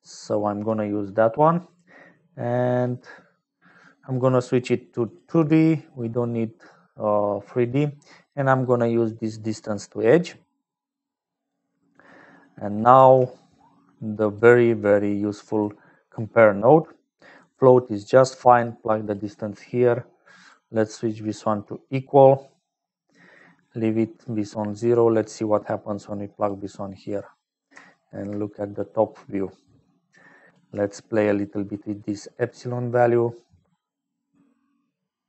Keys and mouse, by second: 0.0-35.2 typing, 0.4 click, 1.0 click, 4.1-5.2 drag, 5.6 click, 7.5-9.3 drag, 11.0 right click, 12.4 click, 18.3 right click, 20.3-21.4 right drag, 23.2 click, 24.1 click, 25.3-26.6 right drag, 30.1 click, 31.6-35.2 shift+drag.